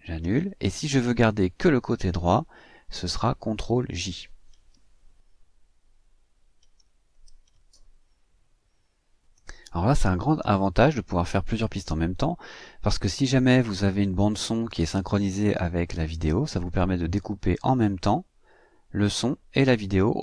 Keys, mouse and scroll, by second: 0.4 ctrl+z, 1.9 ctrl+z, 3.8 ctrl+z, 7.1 ctrl+j.